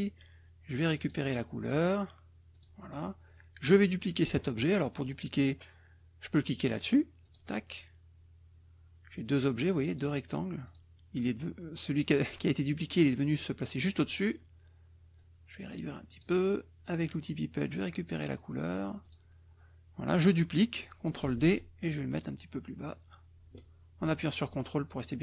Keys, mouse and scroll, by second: 1.0 click, 1.6 click, 2.5 click, 7.2 click, 9.9 click, 10.6 click, 15.1-16.3 drag, 17.0 click, 18.1 click, 19.0 click, 21.2 ctrl+d, 21.5-25.2 ctrl+drag.